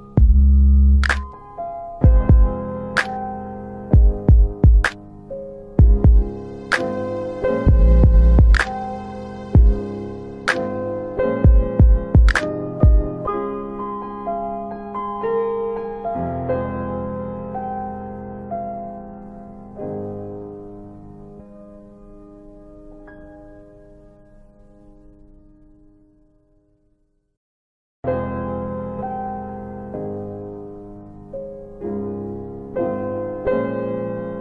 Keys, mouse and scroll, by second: 0.1 alt+click, 3.6 alt+middle click, 4.0 alt+middle click, 4.5 alt+click, 5.2 alt+click, 6.1 alt+click, 25.8 click, 26.6 typing, 29.9 BackSpace, 30.6 BackSpace, 31.6 BackSpace.